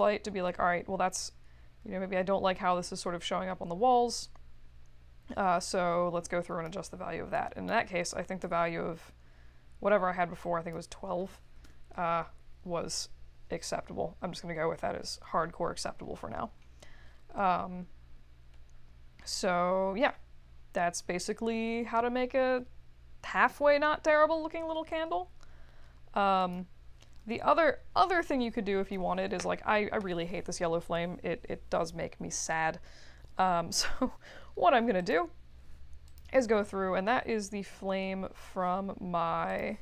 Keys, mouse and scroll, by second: 11.5 2, 19.5 middle click, 34.9 click, 36.0 click, 37.8 middle click, 39.4 click.